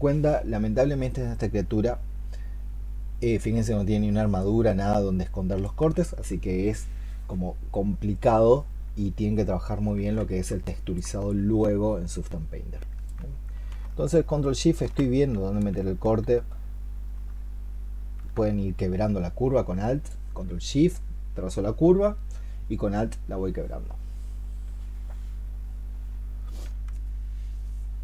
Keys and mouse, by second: 10.3 ctrl+z, 10.5 alt+click, 14.7 ctrl+shift+click.